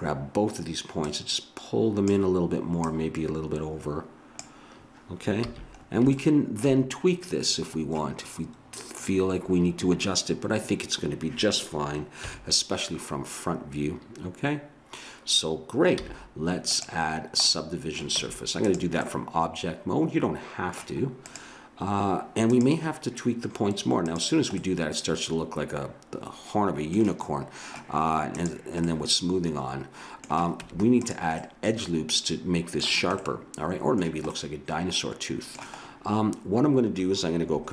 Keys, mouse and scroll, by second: 1.1-2.4 right drag, 2.7-4.4 drag, 5.5 a, 7.7 middle click, 12.2 KP_1, 16.0 z, 17.7 middle click, 18.2 Tab, 19.5 middle click, 20.1 middle click, 20.7 middle click, 21.2-23.2 drag, 24.1 click, 24.6 middle click, 25.2 click, 25.3 middle click, 25.5 middle click, 25.6 click, 25.7 middle click, 28.4-30.1 drag, 28.9 middle click, 30.6 Tab, 31.6-34.0 middle drag.